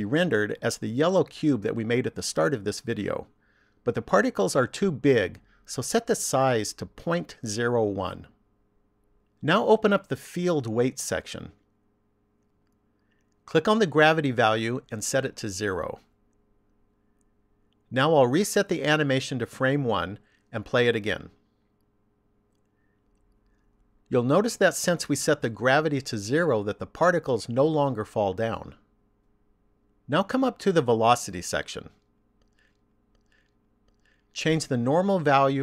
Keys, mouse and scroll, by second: 5.8 click, 10.9 click, 12.4 click, 14.9 click, 19.7 click, 22.1 click, 28.2 click, 32.1 click.